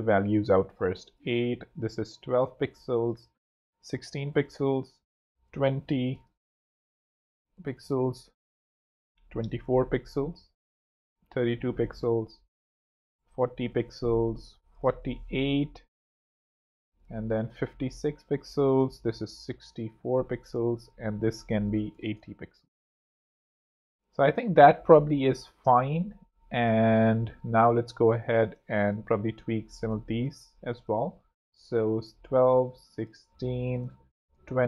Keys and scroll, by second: 0.2 x, 0.3 Escape, 1.9-5.8 typing, 6.9 super+Right, 7.0-7.8 typing, 9.0-11.9 typing, 11.1 super+3, 13.0 super+4, 13.0-13.9 typing, 15.2 8, 15.7 p, 16.1 Escape, 17.2-18.3 typing, 19.4-20.4 typing, 22.2 super+8, 22.4-24.0 typing, 27.9 i, 28.3 Return, 28.8 super+Return, 31.3 i, 31.9 super+Return, 33.8 super+2, 34.0 0, 34.1 KP_Enter.